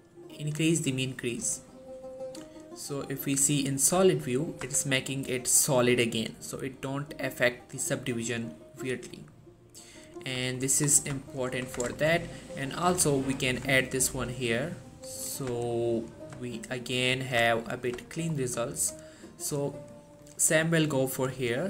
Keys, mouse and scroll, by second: 3.4 click, 4.2 shift+middle click, 4.8 Tab, 6.8 click, 10.7 shift+middle click, 11.3 shift+middle click, 11.5 shift+scroll up 1, 11.8 Tab, 12.0-12.7 shift+scroll up 2, 12.1 shift+middle click, 12.9 click, 13.3 alt+shift+click, 15.6 Tab, 15.8-16.3 scroll down 1, 16.5 shift+middle click, 17.6 shift+middle click, 18.2 shift+middle click, 18.9 click.